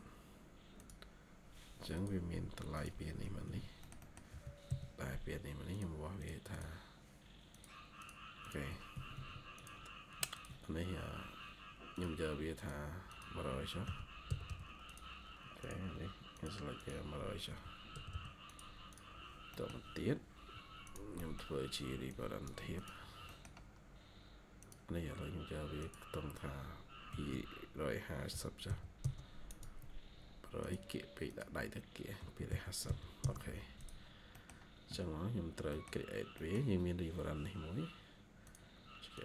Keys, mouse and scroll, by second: 3.1 Escape, 3.3 Escape, 3.4 scroll up 1, 3.7 middle click, 4.2 typing, 6.1 double click, 7.9 double click, 8.8 Escape, 9.0 Escape, 10.2 ctrl+click, 13.5-14.9 typing, 16.7 double click, 17.1-18.5 typing, 18.8 double click, 19.4 middle click, 19.8-20.2 scroll up 1, 21.1 middle click, 22.9 scroll down 1, 23.2 middle click, 23.6 scroll up 1, 27.0 typing, 28.2-28.6 typing, 28.9 Return, 31.8-33.3 typing, 34.0-35.0 scroll down 2, 34.2 middle click, 35.3 scroll up 1, 35.6 middle click, 36.7-37.2 scroll up 1.